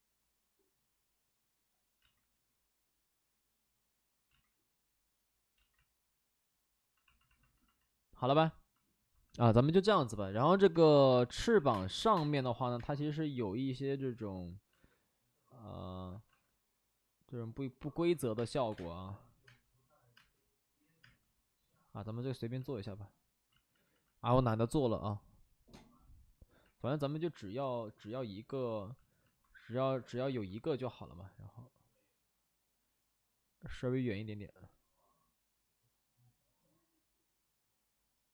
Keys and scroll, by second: 0.0 space, 2.0 ctrl+z, 4.2 ctrl+z, 5.7 ctrl+z, 10.7-12.7 typing, 11.4 alt+s, 14.7 alt+s, 16.2 alt+s, 18.0 alt+s, 18.3-21.0 typing, 23.4 ctrl+z, 23.6 ctrl+z, 23.8 ctrl+z, 26.0 ctrl+z, 26.9 ctrl+z, 30.0 w.